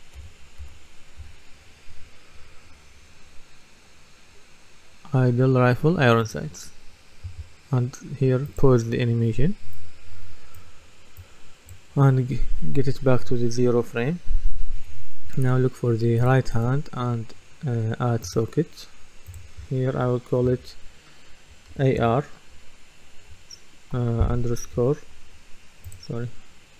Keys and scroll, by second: 0.4-1.2 typing, 20.4 F2, 21.7 shift+a, 22.0 shift+r.